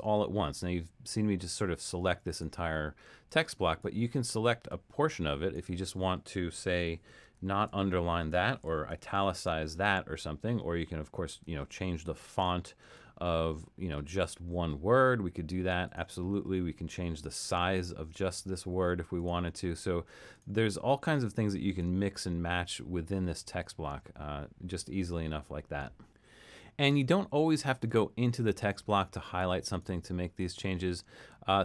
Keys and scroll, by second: 7.4 shift+super+u, 8.9 shift+super+i.